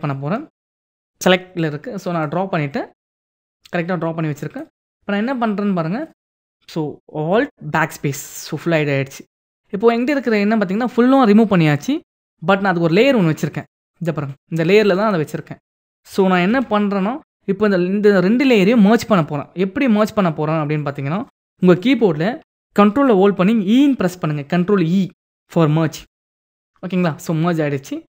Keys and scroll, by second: 7.4 alt+BackSpace, 16.1 ctrl+d, 25.6 ctrl+e.